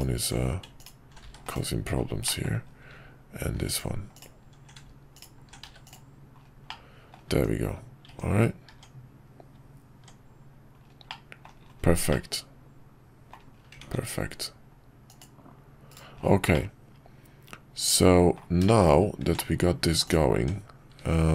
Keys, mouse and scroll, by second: 2.2 middle click, 6.7 middle click, 7.3 Tab, 8.7 Tab, 11.1-11.4 middle drag, 12.1-13.3 middle drag, 13.8 ctrl+`, 16.5-18.4 middle drag, 18.6 shift+middle click, 19.2 Tab.